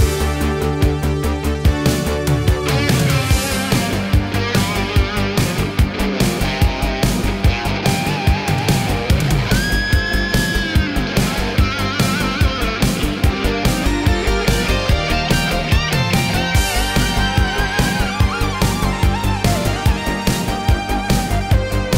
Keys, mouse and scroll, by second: 2.0 ctrl+v, 3.2 click, 4.0 ctrl+v, 5.4-6.1 drag, 10.3-13.2 typing, 14.3 Return, 16.4-19.9 drag.